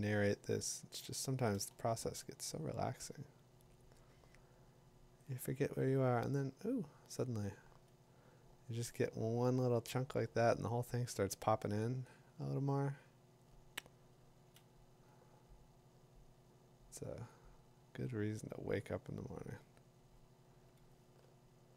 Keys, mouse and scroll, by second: 0.6 click, 1.4 click, 7.2 click, 9.5 click, 14.5 click, 17.3 click, 18.5-20.4 drag, 20.7 ], 21.0 ].